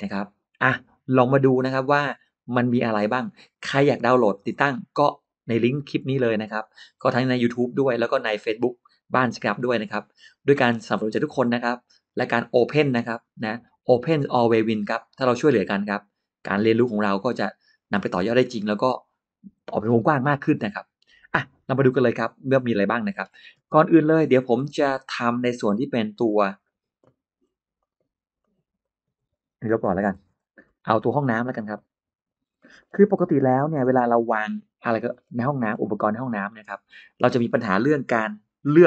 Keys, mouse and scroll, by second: 21.7 shift+right click, 21.8 shift+right click, 22.5-23.2 scroll down 4, 22.7 middle click, 23.5 space, 24.4 middle click, 25.9 click, 27.6 click, 28.2 click, 29.9 Delete, 30.5 middle click, 31.0 scroll up 2, 31.1 middle click, 31.6 click, 32.4 middle click, 33.6 Delete, 33.9 Delete, 33.9-34.3 scroll up 1, 34.3 middle click, 35.0-35.8 scroll down 3, 35.3 middle click.